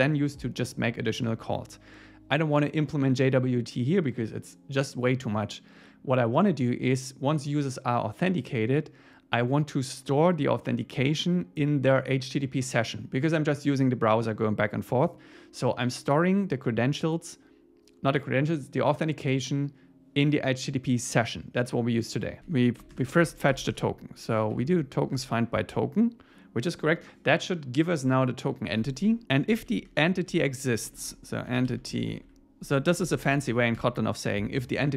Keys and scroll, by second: 25.2 Tab, 29.2 Return, 31.0 shift+super+Left, 33.8 Return.